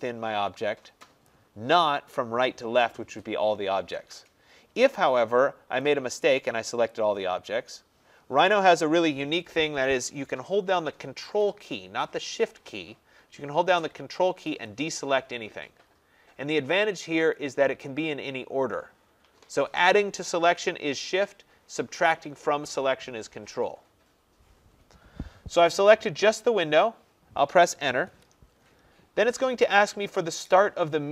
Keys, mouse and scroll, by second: 1.3 click, 6.4 click, 7.0-12.0 drag, 14.0 click, 14.7 ctrl+click, 28.2 Return.